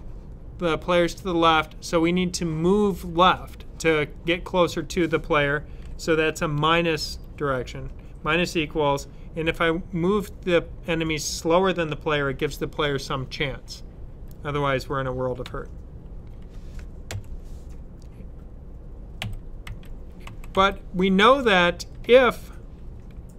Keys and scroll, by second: 6.4-6.9 typing, 11.7 2, 15.3 ;, 16.9 typing, 18.8-20.4 typing.